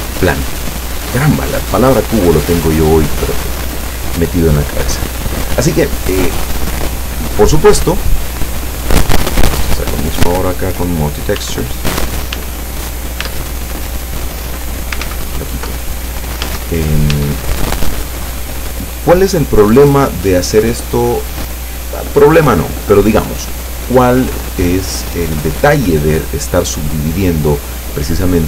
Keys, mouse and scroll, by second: 7.0 click, 8.0 click, 9.2 Tab, 10.3 w, 10.8 click, 11.4 w, 11.8 click, 12.4 w, 12.6 click, 13.3 Tab, 15.1 ctrl+z, 16.5 Tab, 17.3 Tab.